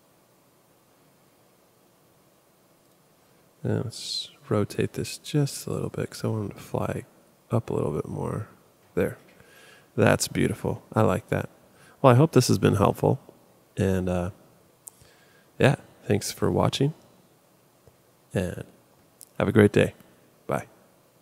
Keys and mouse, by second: 2.9 click, 4.9 r.